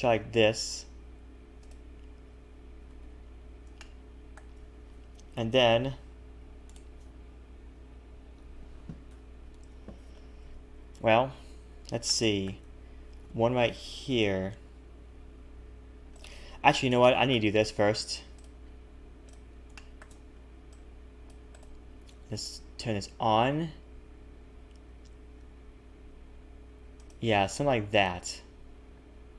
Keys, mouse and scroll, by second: 2.9 a, 3.0 a, 3.2-3.8 scroll down 3, 3.8 shift+middle click, 11.3 KP_1, 12.1 shift+middle click, 13.2 ctrl+r, 17.0 shift+middle click, 17.5-18.4 scroll up 5, 18.4 click, 19.7 click, 19.7 shift+middle click, 20.3 c, 22.4 click, 23.4 g, 27.7-29.3 scroll down 2.